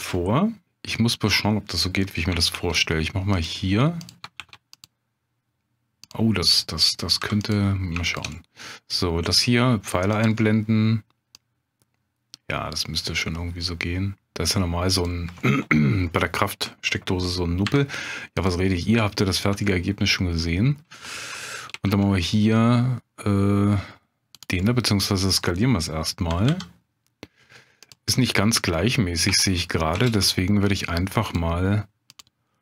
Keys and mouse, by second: 2.5 ctrl+r, 4.0 click, 4.4 ctrl+r, 6.0 click, 7.2 3, 8.0 shift+click, 8.3 middle click, 10.1 click, 11.4-15.0 drag, 15.4 middle click, 17.6 2, 18.3 click, 19.3 shift+click, 19.7-20.7 middle drag, 21.7 ctrl+b, 24.6 click, 24.7 middle click, 26.3 s, 26.5 y, 27.8 click, 28.1 middle click, 29.3 Tab, 30.1 ctrl+space, 32.2-32.6 drag.